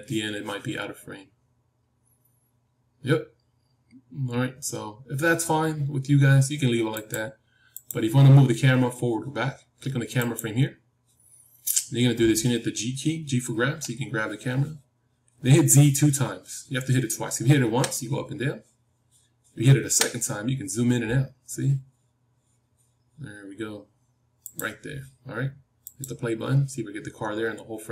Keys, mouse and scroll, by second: 7.8-13.4 drag, 13.6 g, 25.7-27.9 drag.